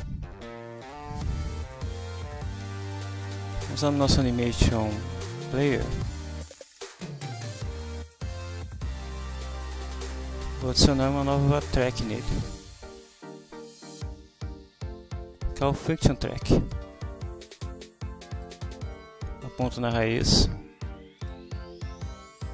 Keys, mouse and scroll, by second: 0.8 click, 2.6 click, 6.6-8.2 drag, 12.6 click, 16.6 click, 18.4 click, 21.2 click.